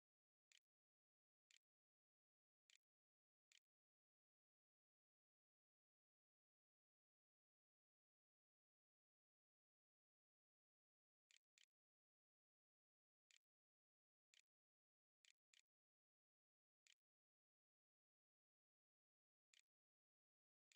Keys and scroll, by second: 0.0-0.4 typing, 0.9 Return, 1.7 shift+Return, 2.2-6.0 typing, 3.0 Return, 9.9-20.7 typing.